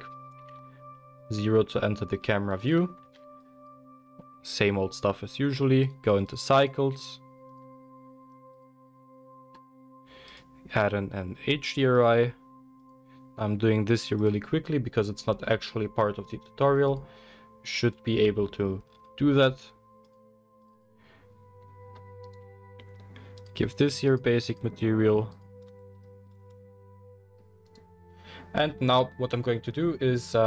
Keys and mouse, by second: 0.3 g, 3.0 ctrl+b, 3.0 ctrl+drag, 3.2-6.6 middle drag, 6.6-9.6 drag, 9.6-12.1 middle drag, 12.1-20.8 drag, 20.8-22.2 middle drag, 22.2 right click, 22.5-23.4 middle drag, 23.4 click, 23.5-24.1 middle drag, 24.1-25.4 drag, 26.1-27.6 middle drag, 27.6 click, 27.8-30.4 middle drag.